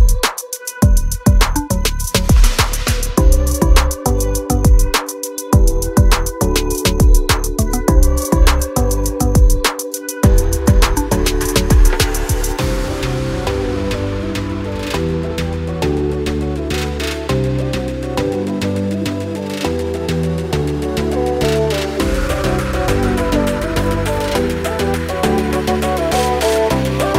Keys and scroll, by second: 4.1 l, 5.4 space, 5.7 r, 8.4 space, 10.3 m, 10.8 Up, 11.7-15.3 typing, 12.0 Return, 13.9 Return, 23.9 m, 25.9-27.1 typing.